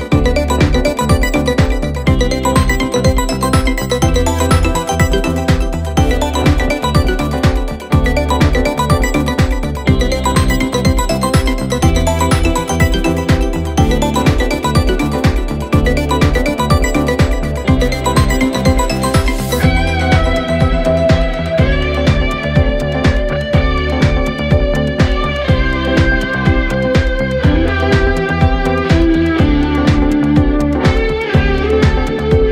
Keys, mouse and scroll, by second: 0.0 g, 3.0 click, 3.3 shift+click, 3.7 click, 4.0 click, 4.3 click, 4.6 shift+click, 5.0 g, 5.9 click, 6.2 shift+click, 6.6 g, 7.4-8.2 middle drag, 8.2 KP_0, 8.7-9.1 scroll down 4, 9.1 click, 9.3-10.1 scroll up 8, 10.1 click, 10.4 shift+click, 10.8 g, 12.5 click, 12.8 click, 13.1 click, 13.3 shift+click, 13.7 g, 14.7 g, 15.7-17.2 scroll down 2, 17.5 click, 18.0 g, 20.5-21.1 scroll down 3, 21.1 click, 21.3-23.0 scroll up 5, 23.0 space, 23.5-24.8 drag, 27.5 click, 27.9-28.4 scroll down 1, 30.0 scroll down 2, 30.0 click.